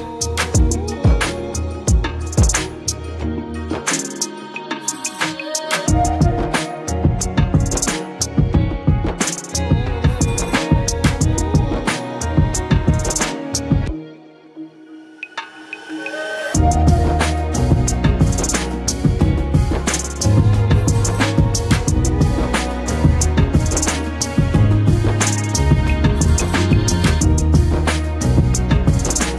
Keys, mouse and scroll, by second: 2.8 ctrl+-, 3.5 space, 3.6-4.2 click, 3.8 space, 4.9-7.4 drag, 9.4 space, 9.8 click, 9.9-10.2 space, 11.6 ctrl+=, 12.4 space, 12.6 click, 12.8-13.8 space, 13.6 space, 14.3 ctrl+=, 16.2 right click, 17.1 click, 18.4 ctrl+t, 19.0 right click, 20.8-26.0 drag.